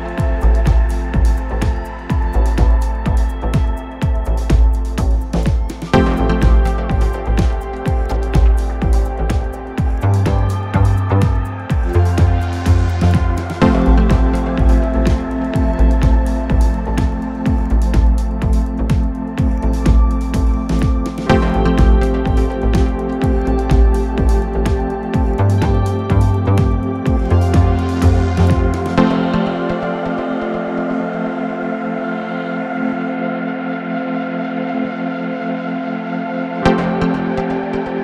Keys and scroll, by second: 5.3 ], 5.9 ], 16.5 ], 18.5 ], 21.4 ctrl+z, 22.0 ], 22.5 ., 23.8 ], 25.3 ], 29.9 3, 32.3 3.